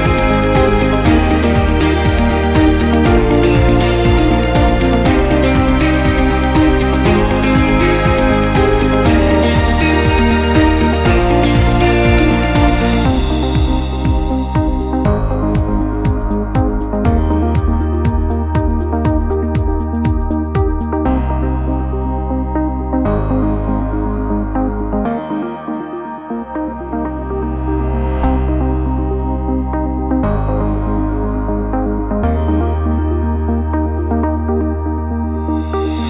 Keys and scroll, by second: 2.7 c, 4.4 c.